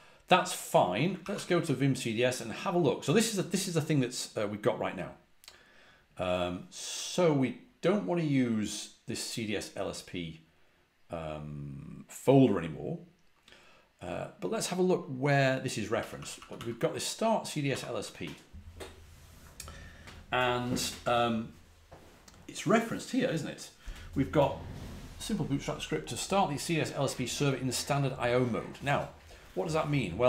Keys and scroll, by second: 1.1 ctrl+a, 1.2 ctrl+l, 15.9-16.5 typing, 17.6 typing.